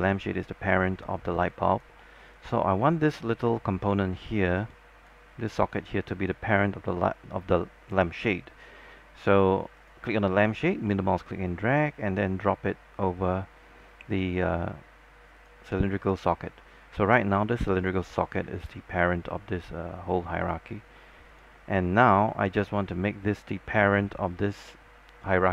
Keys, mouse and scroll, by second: 1.1-1.6 scroll up 1, 1.6 alt+click, 2.1 alt+middle click, 2.5 alt+click, 3.2 click, 3.7 alt+click, 5.0 alt+click, 9.9 click, 11.0 middle click, 15.5 click, 17.3 scroll up 1, 17.9 click, 18.4 scroll down 1, 18.8 alt+middle click, 19.3 scroll up 1, 21.5 click, 22.1 scroll up 1, 22.4 alt+middle click, 24.4-25.5 drag.